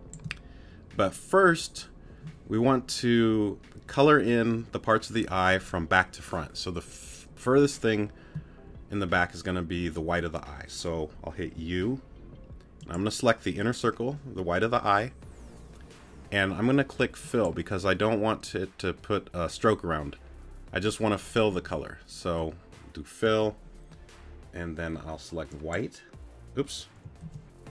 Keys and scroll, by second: 11.6 u.